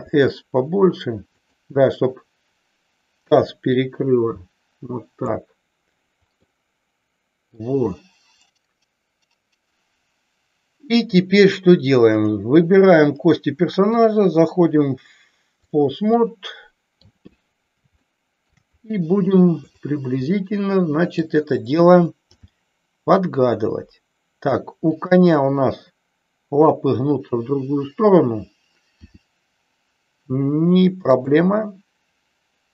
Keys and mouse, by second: 1.4 click, 3.8-5.3 drag, 6.4-7.5 middle drag, 13.9-15.8 drag, 16.0-16.9 middle drag, 18.0-18.4 shift+middle drag, 19.5-20.3 drag, 20.3-21.2 middle drag, 22.3 g, 24.9 click, 28.9 r, 31.0 click.